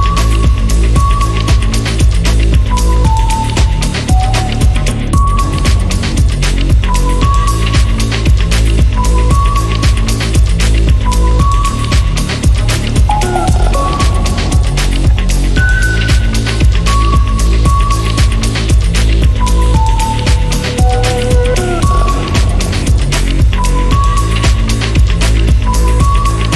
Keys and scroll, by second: 4.9 typing, 17.4-21.1 typing, 21.6 Escape.